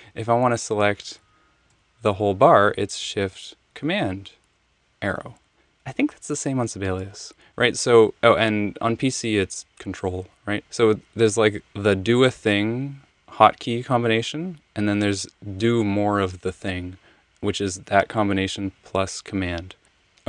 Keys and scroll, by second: 3.9 shift+super+Right, 19.8 super+z.